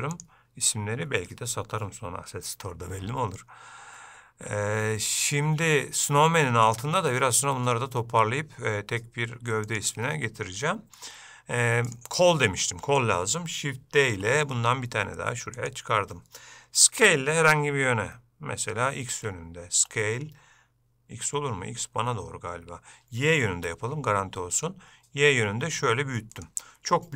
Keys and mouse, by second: 0.3 click, 9.8 click, 10.8 shift+middle click, 12.0 click, 14.3 shift+d.